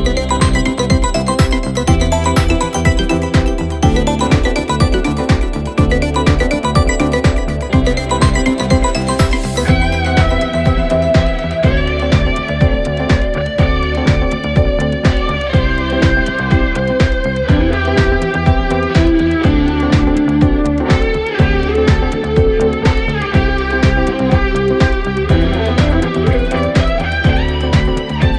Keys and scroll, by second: 4.9 ctrl+F1, 5.4 ctrl+F2, 6.2 1, 8.6 ctrl+z, 8.7 ., 10.7 ctrl+F1, 15.5 3, 21.4 4, 25.8 3, 26.8 ].